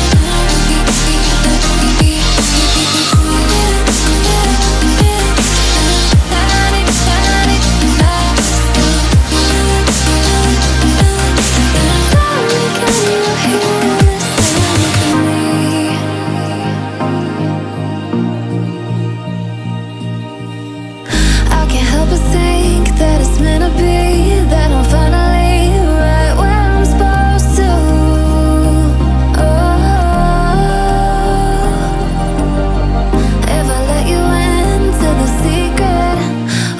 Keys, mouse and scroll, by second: 3.6 alt+scroll down 1, 3.8 alt+scroll up 1, 4.1-5.3 drag, 5.3 ctrl+c, 5.6 click, 6.0 space, 6.5-7.0 alt+scroll down 2, 7.0 click, 7.3 alt+scroll down 2, 7.5-7.9 alt+scroll up 2, 7.9 click, 9.5 click, 13.8 click, 13.8 click, 14.8 alt+scroll up 1, 15.9-16.7 alt+scroll down 1, 17.8 alt+scroll up 1, 17.9 alt+scroll down 1, 18.1 click, 18.9 F7, 19.7-20.5 alt+scroll up 1, 20.5-20.8 alt+scroll down 1, 21.5 click, 22.3 alt+scroll up 1, 22.8 click, 25.5-27.0 typing, 27.2-29.9 drag, 30.1-30.4 alt+scroll up 2, 30.5-32.0 shift+drag, 33.9-34.4 drag.